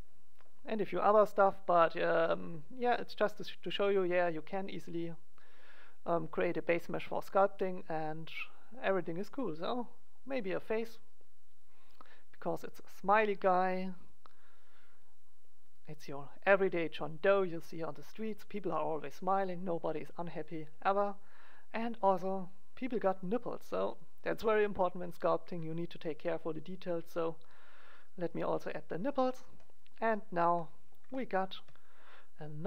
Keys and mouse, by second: 1.2-3.1 drag, 5.1-8.0 drag, 9.7-13.3 drag, 14.1-15.9 drag, 20.8-22.9 middle drag, 22.9-26.5 drag, 27.4-29.6 drag, 29.6-31.0 middle drag.